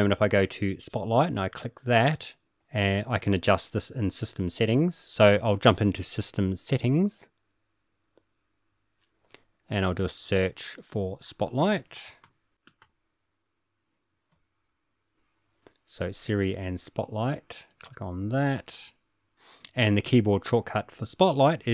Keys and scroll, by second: 12.2-13.5 typing, 15.0 BackSpace, 17.4-17.8 typing, 21.5 typing.